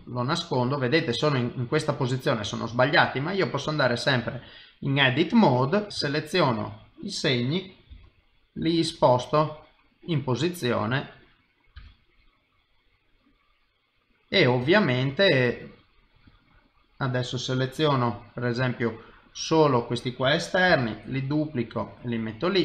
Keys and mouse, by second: 0.1 middle click, 1.5 click, 2.6 ctrl+Tab, 5.9 click, 6.4 shift+click, 6.8 shift+click, 7.9 g, 9.2 middle click, 11.7 g, 13.2 middle click, 14.7 ctrl+middle click, 15.2 middle click, 16.3 click, 17.9 middle click, 19.5 click, 20.7 shift+d, 22.0 middle click.